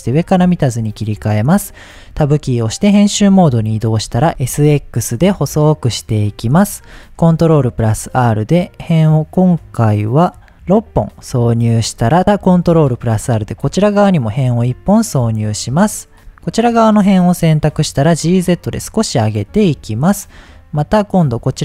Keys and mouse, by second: 0.6 shift+middle drag, 2.0 Tab, 4.0 s, 4.6 s, 4.6 x, 6.1 click, 7.2 ctrl+r, 12.5 ctrl+r, 13.4 click, 14.5 middle click, 15.4 shift+middle click, 17.1 shift+middle click, 18.0 g, 18.1 z, 19.4 click, 19.8 middle click, 20.8 alt+click.